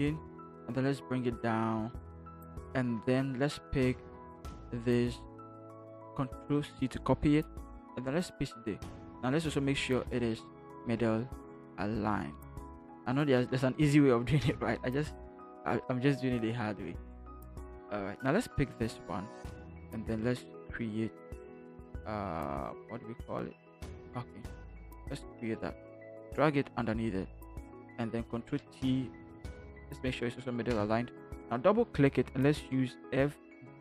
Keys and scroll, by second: 0.4 Down, 2.1 Down, 5.9 ctrl+c, 8.1 ctrl+v, 9.4 ctrl+t, 10.4 Right, 10.6 Right, 10.7 Right, 10.9 Right, 11.1 Right, 11.2 Right, 11.4 Right, 11.5 Right, 13.4 Right, 13.6 Down, 14.4 Return, 16.4 ctrl+=, 28.4 ctrl+t, 29.4 Right, 30.0 Right, 30.7 Return, 33.0 f.